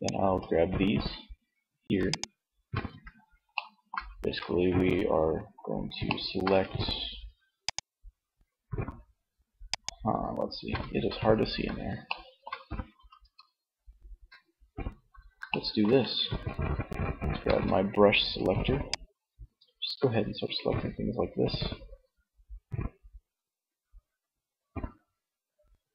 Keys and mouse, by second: 2.1 z, 3.3 z, 10.1 z, 16.7 c.